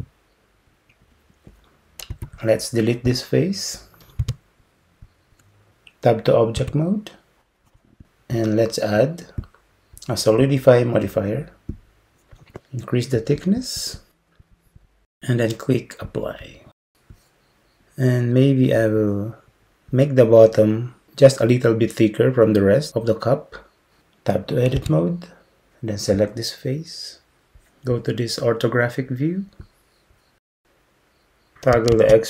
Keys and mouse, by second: 2.2 3, 3.1-4.2 drag, 4.2 x, 6.6 Tab, 9.6-11.8 drag, 13.4 click, 13.6-16.9 drag, 25.0 Tab, 32.0 alt+z.